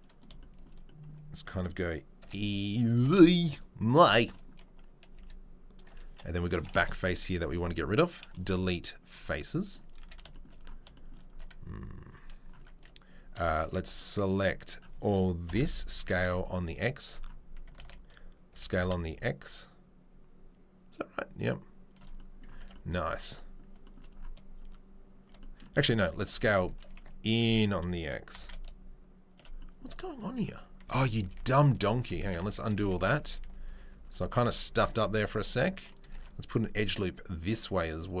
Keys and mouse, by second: 0.2 3, 2.2 r, 2.9 e, 5.1 a, 6.1 3, 7.2 click, 7.3-14.6 middle drag, 8.4 Delete, 10.0 a, 14.6 click, 14.6-38.2 ctrl+middle drag, 15.5 ctrl+l, 15.9 s, 17.8 ctrl+z, 24.6 Tab, 25.3 Tab, 26.2 s, 30.1 Tab, 30.5 Tab, 31.1 ctrl+z, 31.2 ctrl+z, 31.7 ctrl+z, 32.3 ctrl+z, 32.6 ctrl+z, 32.8 ctrl+z, 33.2 ctrl+z, 33.4 ctrl+z, 33.7 ctrl+z, 34.2 ctrl+z, 34.4 ctrl+z, 34.6 ctrl+z, 34.8 ctrl+z, 35.1 ctrl+z, 36.1 ctrl+r.